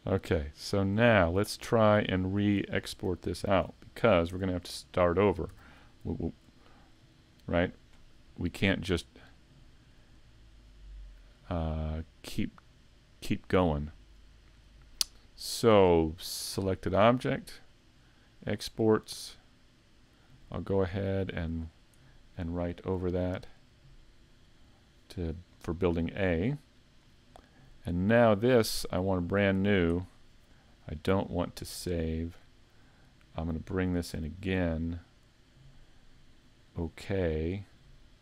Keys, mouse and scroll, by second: 2.7 shift+middle click, 2.7 scroll down 4, 4.3 Tab, 4.8 middle click, 7.2 right click, 23.7 click.